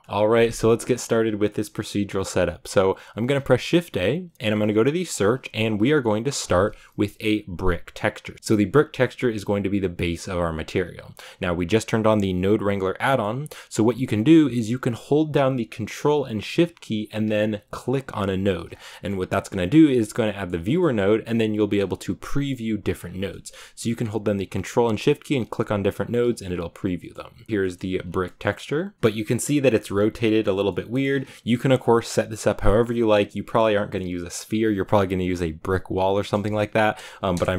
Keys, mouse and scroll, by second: 0.0-8.3 shift+middle drag, 17.9 ctrl+shift+click, 25.1 click, 25.7 ctrl+shift+click, 27.4 middle click, 27.8 scroll up 3, 28.9-31.0 middle drag, 31.0 scroll down 3, 31.1-37.2 middle drag, 37.2 KP_0.